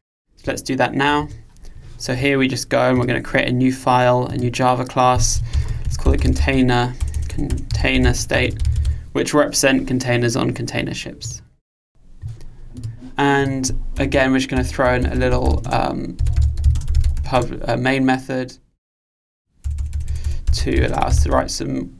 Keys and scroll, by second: 1.2 super+1.